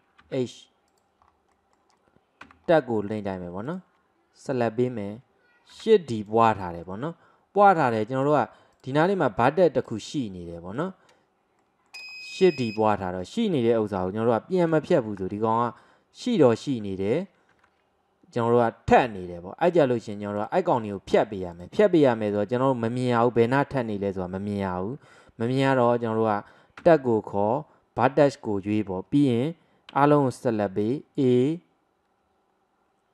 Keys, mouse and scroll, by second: 1.3 scroll up 2, 1.6 middle click, 2.5 Tab, 2.7-3.2 scroll up 2, 3.2 click, 3.7 alt+click, 4.6-5.8 middle drag, 5.8 shift+d, 6.9-7.9 middle drag, 7.9 click, 9.5-9.9 middle drag, 9.9 drag, 10.2 click, 10.8 click, 11.6 middle click, 12.1-12.5 scroll up 1, 12.5-14.0 shift+middle drag, 14.0 Tab, 14.6 drag, 15.2 g, 17.6 ctrl+z, 19.8 click, 20.1 click, 21.2 click, 21.6 click, 22.3 click, 26.8 Tab, 30.0 a, 30.9-33.1 right drag.